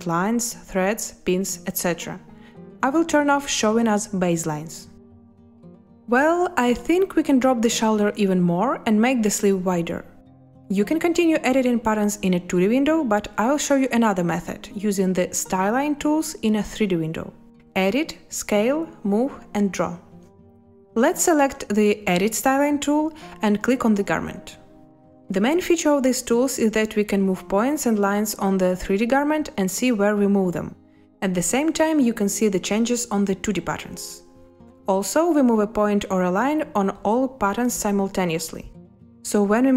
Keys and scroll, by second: 31.6 ctrl+z, 37.6 Escape.